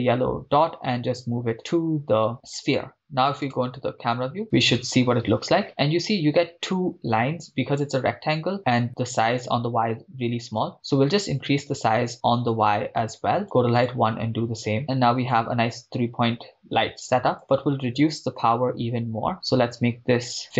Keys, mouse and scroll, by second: 3.5 KP_0, 10.6-13.4 drag, 13.8-15.5 drag, 17.3-20.4 drag.